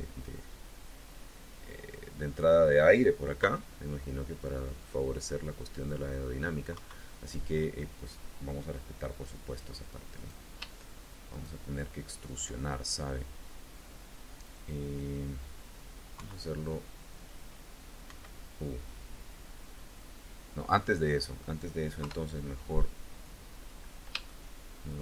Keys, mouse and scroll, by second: 3.3 KP_3, 6.6 KP_1, 8.0-8.5 scroll up 2, 10.0 click, 11.1 shift+click, 14.6-16.2 middle drag, 16.0 KP_3, 17.9 KP_1, 20.3-21.4 middle drag, 21.9 KP_3, 22.8-23.3 scroll down 4, 23.7 scroll up 2, 24.1-25.0 shift+drag.